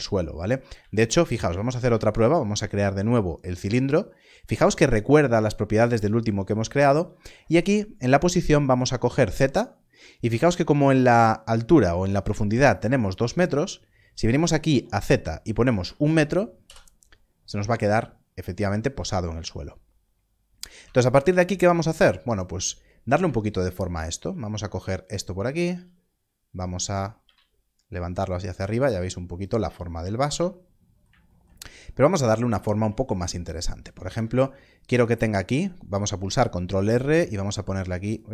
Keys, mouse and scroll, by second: 0.9 x, 1.6 shift+a, 3.6 click, 15.0 click, 16.5 click, 17.0 Return, 20.7 Return, 20.7 Tab, 22.4 scroll, 22.4 scroll up 1, 24.7 alt+click, 25.6 s, 26.8 click, 27.2 z, 28.4 click, 29.3 s, 29.4 click, 31.4 scroll down 1, 34.0 ctrl+r, 34.9 click, 38.0 click.